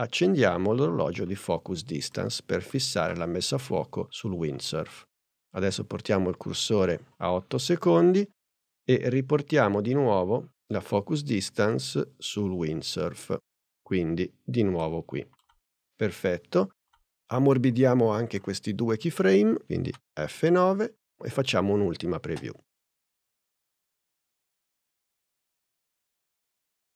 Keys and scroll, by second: 19.9 F9, 22.4 space.